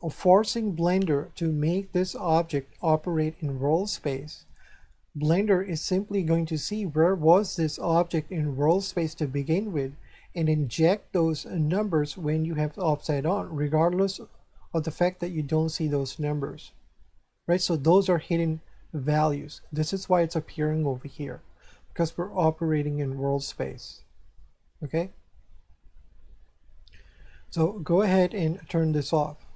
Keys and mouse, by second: 28.7 click.